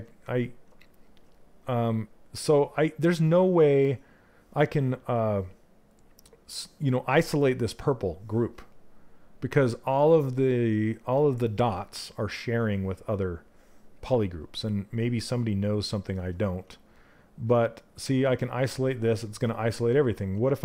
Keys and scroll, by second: 19.5 ctrl+z.